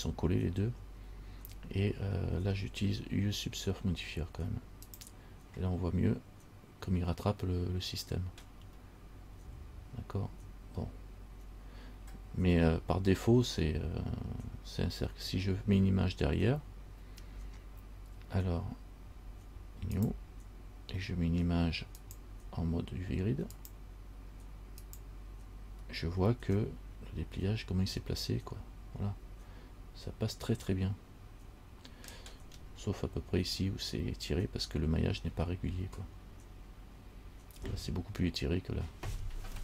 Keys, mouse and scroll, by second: 5.1 click, 6.3-8.2 scroll down 3, 20.1 click, 26.2-26.5 scroll down 4, 26.9 middle click, 32.5-34.7 scroll up 3.